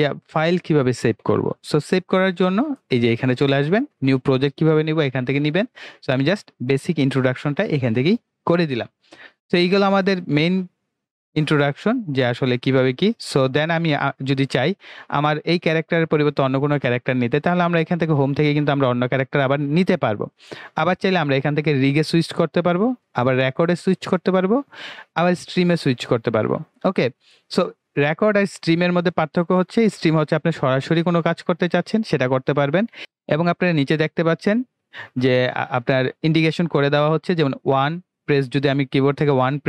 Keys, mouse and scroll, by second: 8.4 click, 18.1 click, 21.9 click, 28.2 click.